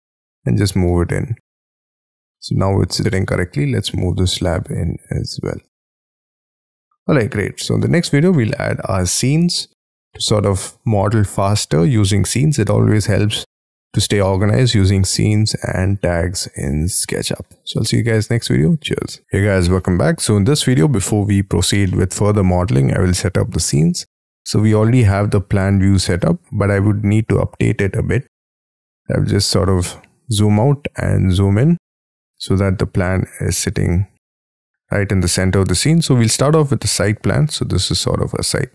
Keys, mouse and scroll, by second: 0.3 shift+click, 0.8 middle click, 2.8 space, 3.5 m, 5.2 shift+click, 5.5 scroll down 1, 5.6 space, 5.9 middle click, 7.7 middle click, 8.0 space, 8.3 middle click, 15.8-16.9 scroll up 1, 16.9 middle click, 19.7 middle click, 20.3-20.7 scroll down 7, 20.9-21.8 scroll up 6, 21.8 middle click, 22.4 middle click, 23.0-23.7 scroll down 6, 26.4-27.9 scroll down 4, 27.9-28.3 scroll down 3, 28.3 scroll up 6, 28.7 scroll down 2, 29.6-30.4 scroll down 7, 30.4-31.0 scroll up 9, 31.2 scroll down 3, 32.6-33.1 scroll down 1, 33.1-33.9 scroll up 8, 33.9-35.1 scroll down 8, 35.1 scroll up 2, 36.0 scroll up 1, 36.3-38.7 scroll down 1.